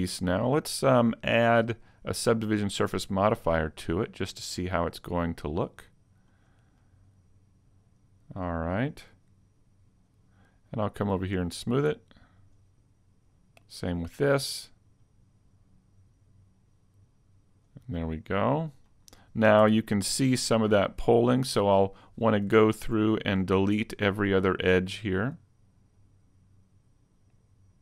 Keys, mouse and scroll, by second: 0.1 scroll up 2, 0.5 middle click, 4.0 right click, 4.9 click, 6.8 middle click, 8.8 middle click, 9.9 click, 11.2 click, 12.4 click, 13.2 right click, 13.4 click, 14.0 click, 16.5 click, 17.5 click, 18.5-18.9 scroll up 1, 18.9 middle click, 19.6 Tab, 20.4-21.1 scroll up 7, 21.2 shift+middle click, 22.6 ctrl+Tab, 24.8 right click, 26.0 shift+right click, 27.0 right click.